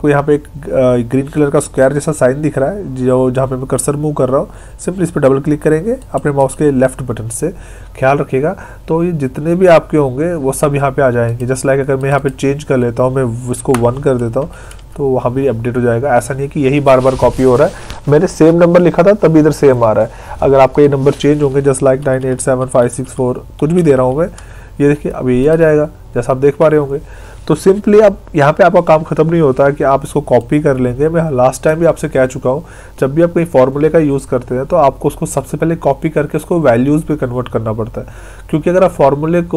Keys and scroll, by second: 13.6 Delete.